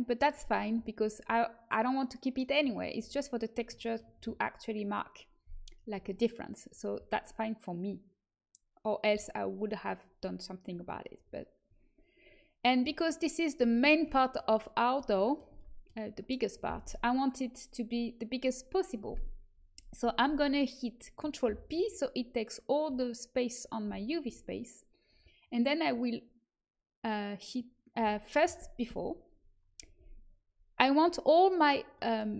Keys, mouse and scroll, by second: 21.4 ctrl+p, 23.8 a, 24.1 a, 27.9 a, 31.9 middle click.